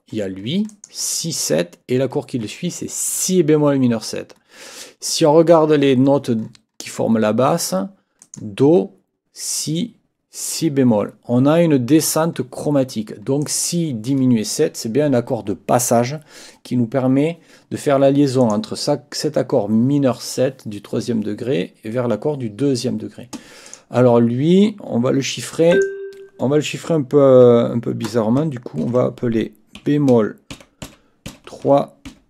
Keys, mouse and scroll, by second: 0.7 click, 3.1 click, 8.2 click, 13.4 click, 18.4 click, 23.6 click, 25.7 click, 28.8 ctrl+t, 29.8 b, 30.5 shift+i, 32.1 shift+m.